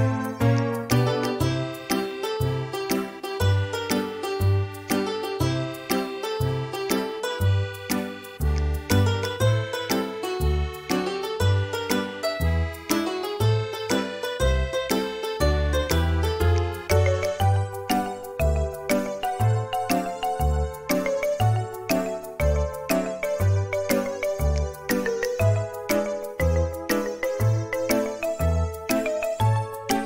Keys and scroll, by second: 8.7 m, 11.1 space, 18.3 space, 29.7 ▯.